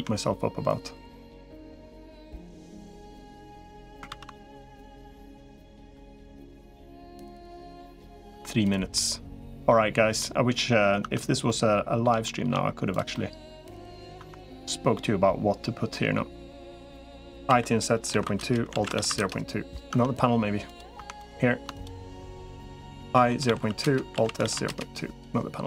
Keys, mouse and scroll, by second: 1.3 click, 1.9 KP_Decimal, 4.5 ctrl+z, 5.7 KP_Decimal, 6.7 middle click, 8.3 Tab, 8.5 click, 8.8 middle click, 10.0 middle click, 10.9 Tab, 11.3 middle click, 12.1 shift+middle click, 13.1 middle click, 14.1 Tab, 14.8-16.0 middle drag, 17.3 i, 18.7 alt+s, 19.7 Tab, 20.9 Tab, 21.1 click, 23.1 i, 24.1 alt+s, 25.5 Tab.